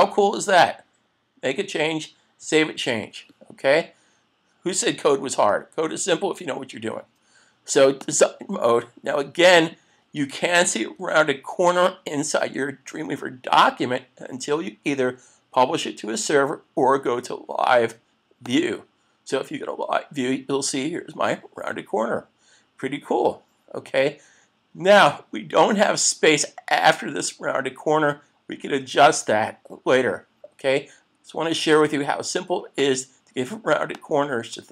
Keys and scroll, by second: 2.4 super+s, 11.0 super+s.